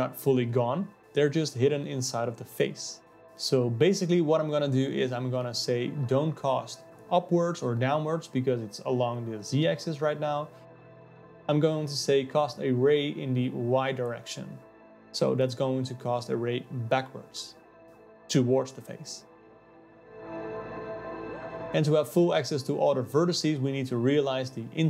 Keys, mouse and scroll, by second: 0.6 click, 4.0 click, 5.0-7.8 drag, 7.8 d, 7.9 s, 9.3-12.3 alt+middle drag, 12.3-15.2 drag, 15.2 d, 15.5 ctrl+z, 15.7-18.0 drag, 18.0 ctrl+z, 18.1-19.5 drag, 19.5 ctrl+z, 19.7-21.5 drag, 21.5 KP_0, 22.6 shift+a.